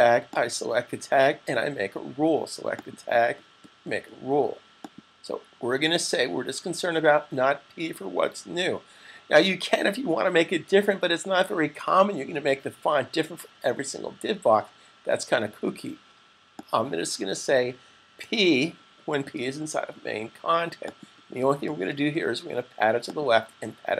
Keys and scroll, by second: 18.0 p, 20.5 typing.